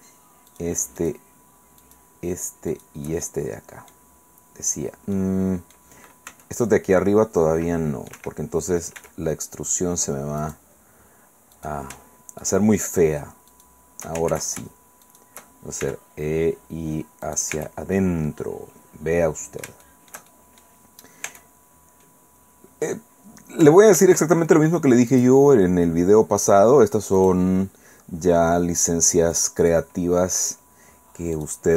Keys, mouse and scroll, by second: 1.0 shift+right click, 2.7 shift+right click, 3.2 shift+click, 5.1 click, 6.3 c, 6.8 middle click, 7.2-8.3 drag, 8.1 Escape, 8.3 middle click, 9.0 e, 10.4 click, 12.4 shift+right click, 13.5 shift+right click, 14.3 ctrl+shift+z, 15.0 shift+right click, 15.8 shift+e, 17.2 click, 17.5 Tab, 17.9 middle click, 18.2-20.8 drag, 21.3 Tab, 24.0 ctrl+r, 25.1 click, 27.2 click, 29.3 click, 31.3 right click.